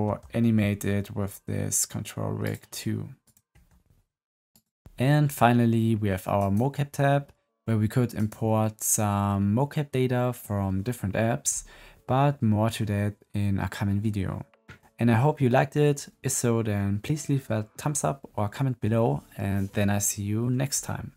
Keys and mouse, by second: 0.0 g, 3.5 g, 6.3 click, 8.0 click.